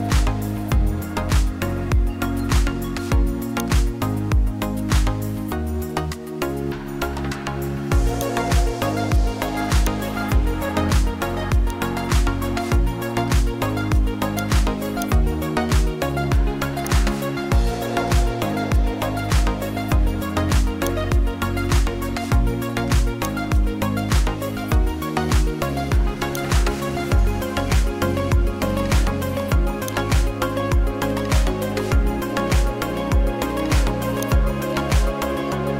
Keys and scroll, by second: 12.6 ctrl+j, 21.7 1.